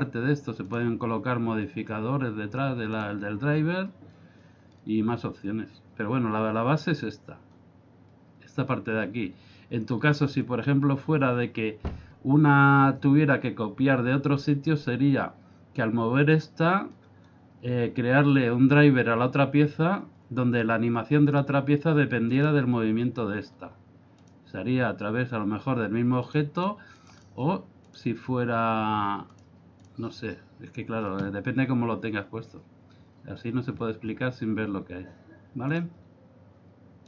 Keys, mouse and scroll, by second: 0.7 click, 2.9 click, 22.3 right click, 24.2 click, 29.4 click.